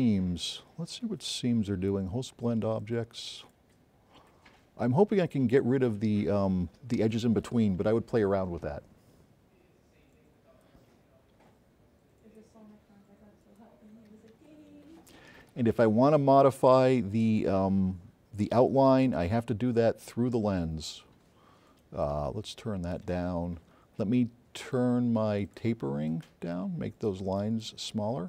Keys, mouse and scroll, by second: 2.0 click, 5.7-6.4 drag, 8.2 scroll up 4, 18.7 click, 19.9-20.5 drag, 21.7 click, 25.0-26.0 drag.